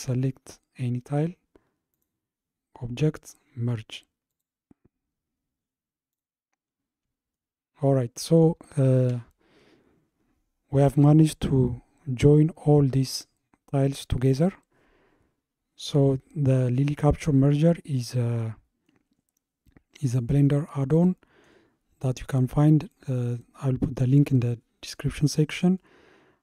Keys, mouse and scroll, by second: 1.9-5.0 drag, 6.1 click, 7.4-10.5 shift+middle drag, 18.0-19.1 middle drag, 19.1 scroll up 2, 20.5-23.6 middle drag, 25.8-26.4 shift+middle drag.